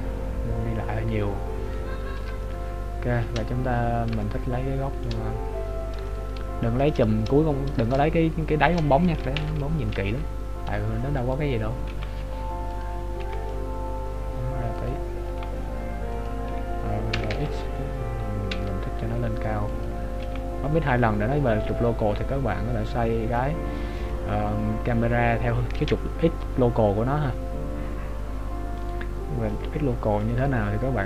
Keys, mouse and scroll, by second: 0.2 click, 2.4 shift+middle click, 3.5-4.1 scroll up 1, 4.3 shift+middle click, 4.3-5.6 scroll up 1, 6.1 shift+middle click, 8.1 shift+middle click, 9.6 ctrl+alt+KP_0, 11.3 right click, 11.9 g, 27.1-29.0 scroll down 2, 29.0 right click, 29.6 middle click, 30.8-31.0 scroll down 2.